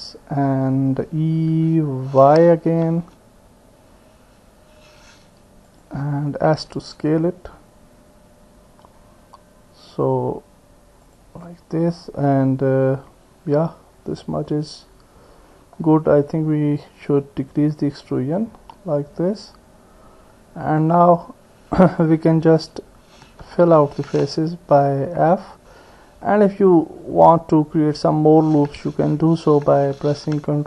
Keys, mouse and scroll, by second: 1.5 e, 5.2-7.9 drag, 6.5 s, 11.4-15.1 drag, 15.1 middle click, 16.8-18.0 drag, 18.4 middle click, 19.2-20.8 drag, 20.8 middle click, 23.6 f, 26.3 click, 29.7 ctrl+r.